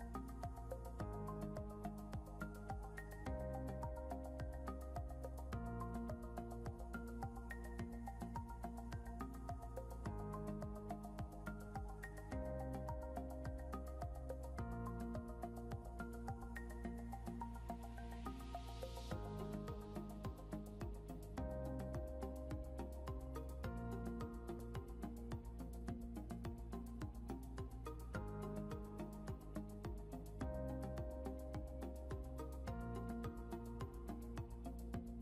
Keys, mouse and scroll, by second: 2.6 scroll down 1, 3.6 scroll up 1, 8.1 scroll down 1, 9.8 scroll up 1, 10.6 scroll up 1, 11.4 scroll up 1, 16.1 ctrl+g, 21.4 ctrl+Home, 24.1 scroll up 1, 29.0 scroll down 1, 30.1 scroll up 1, 34.8 scroll down 1.